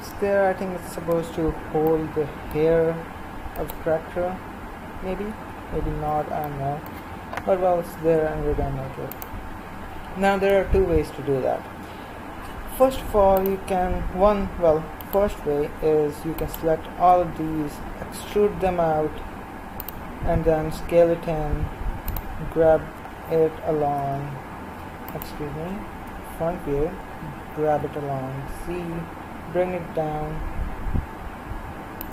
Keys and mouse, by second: 3.6-18.2 right drag, 18.2 e, 20.7 s, 22.9 g, 26.0 KP_1, 27.4 g.